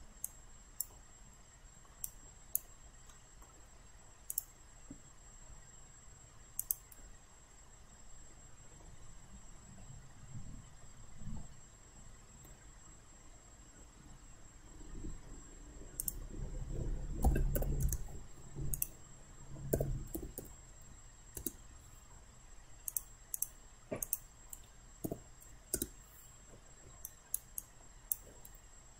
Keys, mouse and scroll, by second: 0.3 alt+click, 1.2 alt+middle click, 2.0 alt+right click, 3.1 alt+middle click, 4.3 click, 7.6-12.6 middle drag, 16.0 click, 17.6 1, 17.9 Return, 18.8 click, 20.4 1, 21.4 Return, 23.0 click, 25.1 5, 25.8 Return, 27.1 alt+right click, 27.6 alt+click.